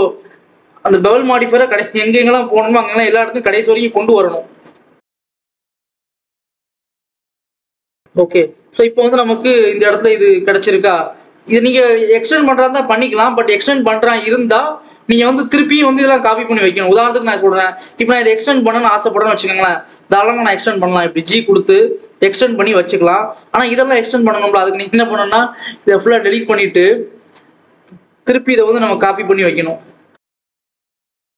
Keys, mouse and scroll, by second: 1.4 KP_0, 3.5-4.6 right drag, 4.6 click, 5.4 click, 6.0 click, 6.4 KP_0, 6.9 scroll up 1, 7.0 scroll down 2, 7.1 alt+a, 7.5 click, 8.6 ctrl+s, 9.3 click, 9.7-10.2 scroll up 4, 10.2-11.0 scroll down 1, 11.0 KP_7, 11.5-12.0 scroll down 1, 13.2 scroll up 1, 14.6-15.6 scroll up 3, 15.6-16.4 scroll down 2, 16.4 click, 17.0 Tab, 17.4 alt+a, 17.7-18.6 scroll up 1, 19.0 click, 19.6 click, 20.9 g, 23.0-23.6 scroll down 1, 23.6 alt+a, 24.0-25.0 scroll down 2, 25.0 l, 25.4 l, 26.6 x, 27.6 a, 28.0 shift+d, 28.7 r, 30.1 a, 30.3 shift+d, 30.6 r.